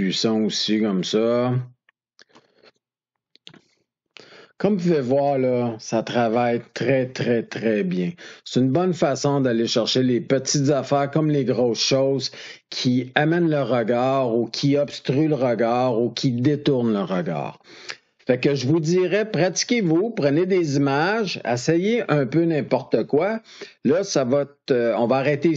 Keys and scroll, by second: 6.1 ctrl+d.